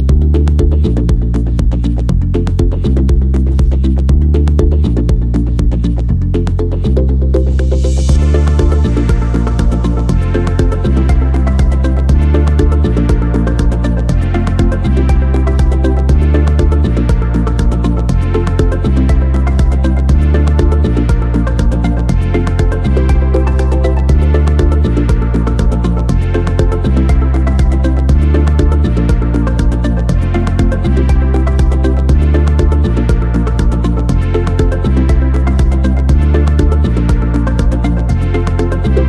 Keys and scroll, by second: 2.9 m, 5.6 ctrl+c, 10.2 ctrl+c, 11.6 r, 12.3 r, 13.3 9, 13.3 0, 13.5 Return, 14.5 m, 19.2 s, 24.5 n, 25.4 m, 32.4 ctrl+c, 37.7 s.